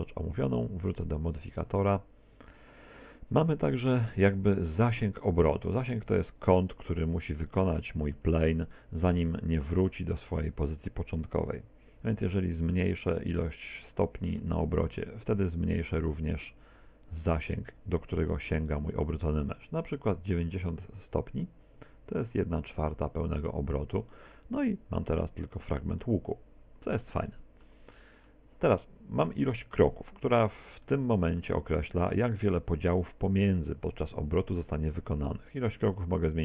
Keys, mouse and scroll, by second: 1.5 right click, 7.7 middle click, 8.3 z, 8.7 middle click, 9.2 Tab, 12.6 z, 13.5 middle click, 14.1 middle click, 15.2 click, 24.1 middle click, 26.0 middle click, 27.3 middle click, 27.9 middle click, 30.3 z, 30.9 middle click, 31.8 middle click, 36.0 click.